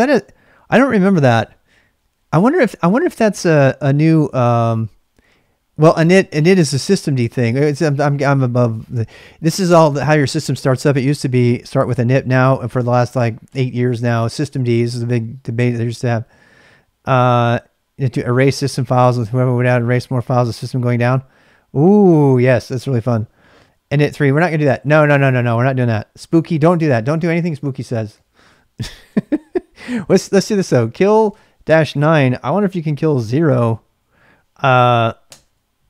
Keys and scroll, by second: 28.6-33.2 typing, 35.3 Return.